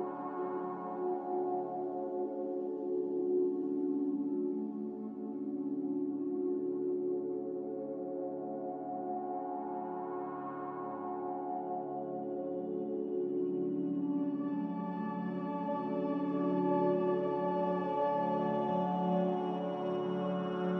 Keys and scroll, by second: 5.0 q.